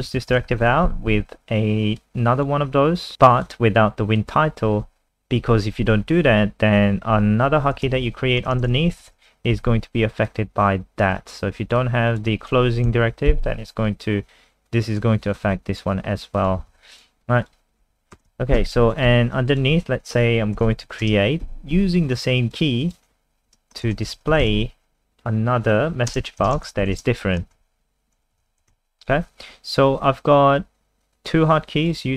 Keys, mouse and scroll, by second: 0.1 ctrl+End, 0.3 Return, 0.5 ctrl+v, 0.6 ctrl+s, 2.0 click, 6.0 Return, 7.5-9.5 typing, 9.6 Escape, 10.3 click, 12.9 Delete, 14.7 click, 16.7 ctrl+z, 16.9 click, 17.4 click, 17.9 Right, 18.2 BackSpace, 18.3 a, 19.1 Escape, 19.5 click, 20.3-21.5 typing, 22.2 click, 23.6-28.9 typing, 29.0 click.